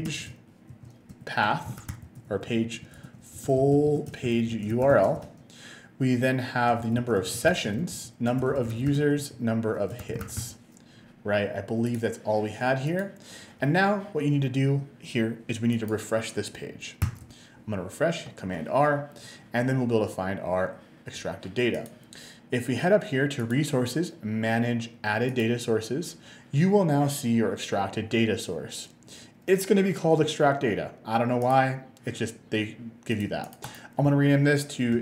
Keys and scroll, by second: 0.0-5.0 typing, 5.2 Tab, 6.8-10.9 typing.